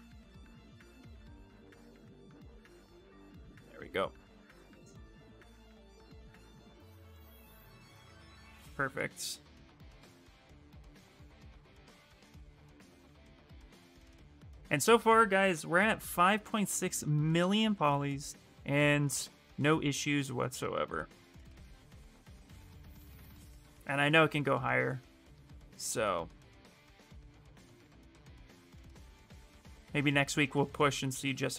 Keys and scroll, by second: 5.6-6.7 typing, 29.6 s.